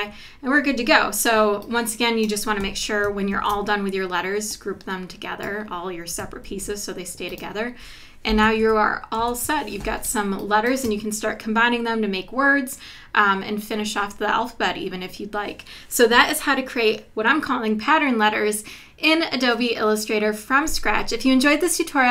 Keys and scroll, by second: 3.3 super+g, 6.5 super+g, 8.6 super+-, 9.7 super+-, 10.1 space.